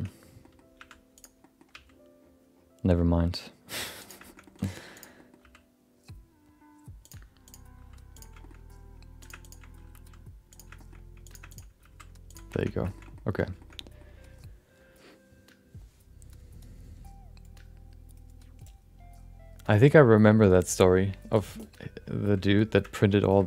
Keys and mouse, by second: 0.4 middle click, 0.8 1, 1.1 click, 1.4 middle click, 1.7 g, 4.2 shift+middle click, 4.4 middle click, 4.9 click, 5.1 middle click, 5.4 g, 7.4 click, 7.7 g, 8.4 middle click, 9.2 click, 9.4 click, 9.8 g, 10.7 middle click, 11.2 click, 11.5 shift+click, 11.8 g, 12.7 Tab, 12.8 shift+middle click, 13.0 middle click, 13.6 shift+middle click, 13.8 middle click, 22.9 shift+middle click, 23.1 middle click, 23.4 shift+middle click.